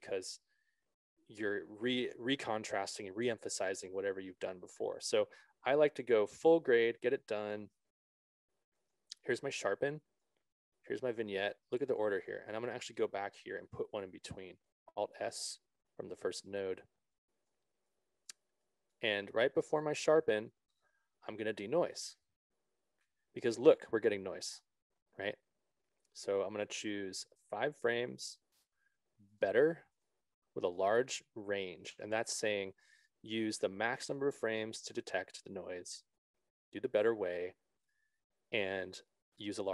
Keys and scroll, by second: 14.5 alt+s.